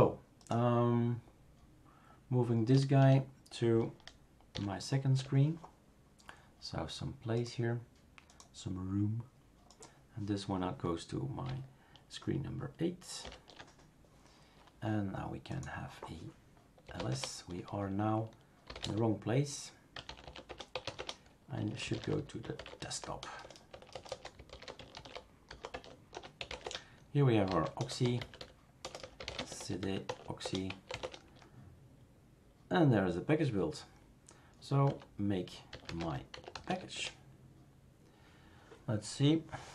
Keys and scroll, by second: 4.5 shift+super+7, 13.3 shift+super+8, 16.6-31.5 typing, 25.7 Tab, 30.4 Return, 34.8-37.1 typing.